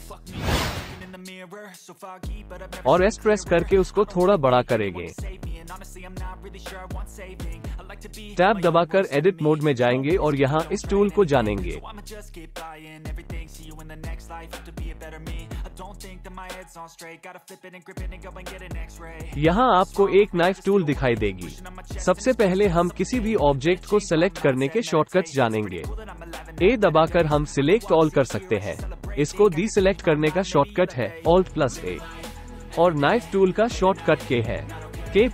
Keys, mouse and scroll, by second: 0.6 q, 4.4 alt+shift+click, 5.0 g, 5.2 z, 6.3 s, 7.2 KP_1, 8.1 g, 8.7 z, 10.3 Tab, 10.8 middle click, 13.0 alt+a, 28.4 a, 32.1 alt+a, 35.1 k.